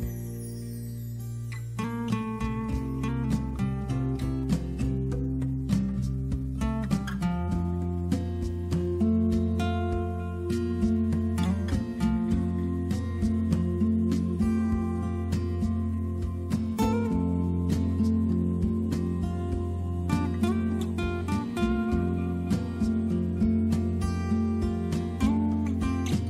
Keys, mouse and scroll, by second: 6.7 click, 14.5 click, 17.0 click, 18.8 click, 20.6 click, 21.4 click.